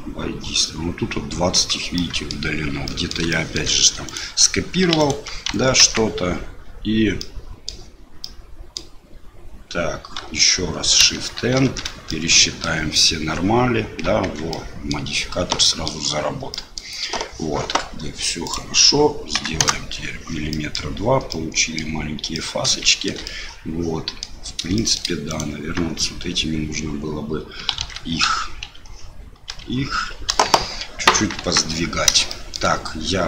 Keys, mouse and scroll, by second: 1.9 middle click, 2.8 middle click, 3.3 shift+click, 4.0 click, 5.0 alt+click, 5.8 ctrl+x, 7.2 middle click, 8.2 middle click, 10.2 a, 11.5 shift+n, 12.1 click, 14.2 Tab, 14.5 click, 15.6 middle click, 16.5 middle click, 18.4-20.3 drag, 20.5 middle click, 21.3 middle click, 22.3 middle click, 22.9 shift+middle click, 23.3 middle click, 24.7 shift+middle click, 25.3 click, 25.9 Tab, 27.8 alt+a, 28.2 l, 28.7 l, 29.5 l, 30.3 KP_1, 31.4 KP_3, 32.4 shift+click.